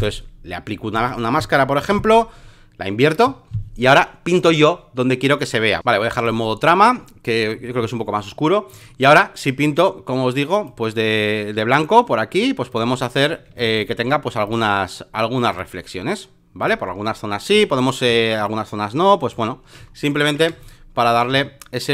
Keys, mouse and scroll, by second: 1.8 ctrl+i, 4.4-8.2 drag, 8.7-13.4 drag, 13.5 ctrl+z, 13.7-18.0 drag, 18.0 x, 18.4-19.7 drag, 19.8 alt+scroll, 20.4 space, 20.6 click, 20.6 right click, 21.3 v.